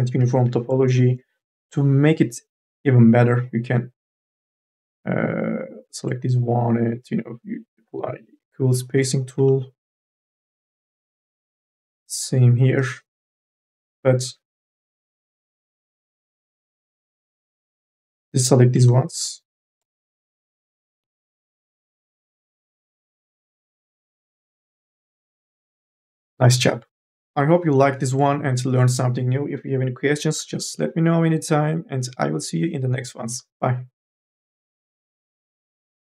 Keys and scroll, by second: 0.0 q, 1.3 2, 1.5 e, 10.9 ctrl+z, 11.1 e, 13.3 space, 15.1 9, 27.2 4, 27.6 e.